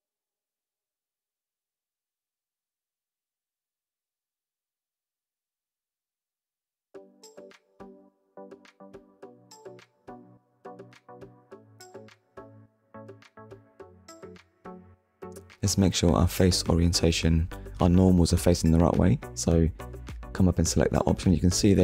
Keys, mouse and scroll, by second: 0.9-1.3 scroll down 2, 1.4 shift+middle click, 1.9 middle click, 4.1 click, 5.0 click, 6.8 click, 7.4 click, 9.5 middle click, 12.1 click, 18.7 click, 20.4 middle click.